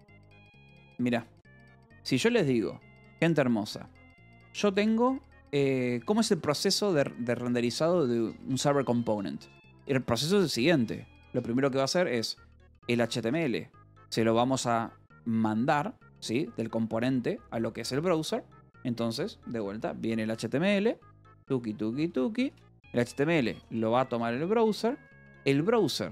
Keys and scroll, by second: 0.5 shift+g, 1.3 o, 2.0 Return, 5.9 Escape, 6.5 a, 12.8-14.1 typing, 17.1 l, 21.1 shift+;, 22.5-25.0 typing.